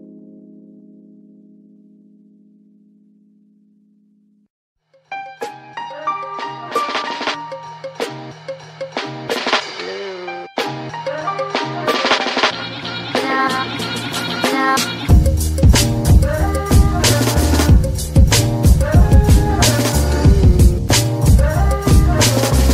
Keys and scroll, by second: 6.2 KP_9, 6.2 KP_0.